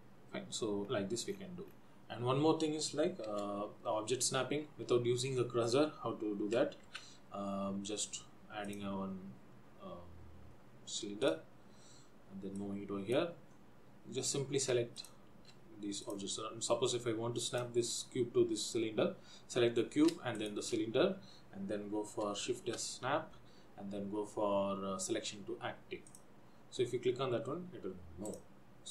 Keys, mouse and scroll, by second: 1.0-1.4 scroll down 2, 3.6-4.7 scroll down 5, 7.1 shift+a, 12.8 click, 13.6-14.9 scroll up 4, 15.2 shift+click, 16.4 click, 17.6 click, 18.0 shift+click, 20.6 shift+click, 22.8 shift+s, 28.4 click.